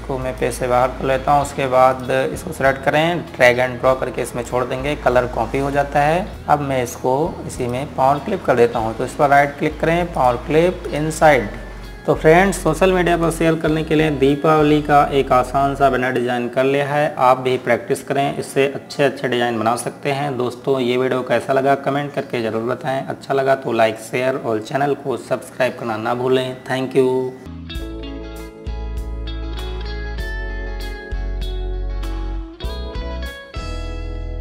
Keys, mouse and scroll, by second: 0.0-0.5 scroll down 1, 0.7 click, 8.3 click, 9.9 right click, 10.9 click.